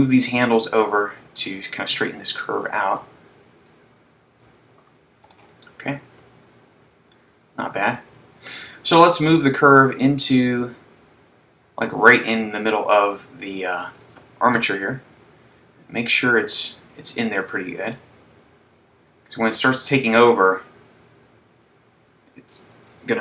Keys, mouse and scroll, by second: 0.1 click, 7.1-8.1 scroll down 1, 8.1 Tab, 9.2 click, 14.8 KP_7, 16.7 click, 20.7 g.